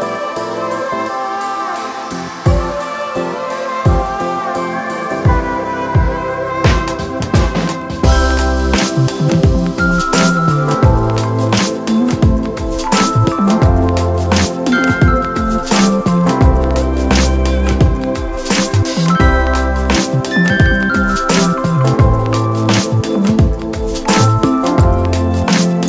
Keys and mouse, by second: 8.0 click, 9.6 click, 9.9-13.9 alt+drag, 15.8 click, 17.2-22.8 drag, 24.0 click, 24.7-25.8 drag.